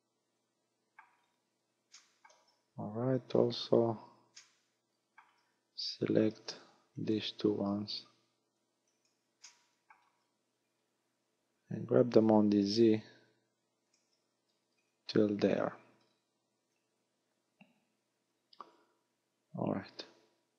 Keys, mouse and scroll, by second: 1.2 scroll down 5, 2.0 shift+middle click, 3.1 KP_1, 4.4 shift+middle click, 6.3 z, 6.9 b, 7.7-8.2 scroll down 3, 8.0 a, 8.8 b, 9.5 shift+middle click, 10.1 scroll down 1, 10.4-10.8 scroll up 4, 12.4 g, 14.0 ctrl+click, 14.6-15.6 scroll down 6, 16.2 scroll down 5, 16.7 a, 19.3-20.5 scroll up 6.